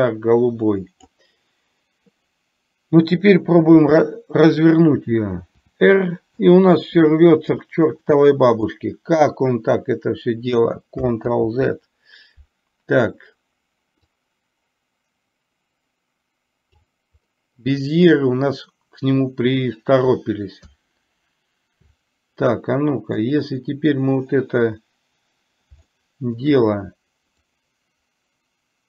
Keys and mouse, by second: 5.7 r, 8.2-8.7 middle drag, 11.5 ctrl+z, 14.4-16.9 drag, 23.4 click, 26.0-26.5 shift+middle drag, 27.7-28.8 drag.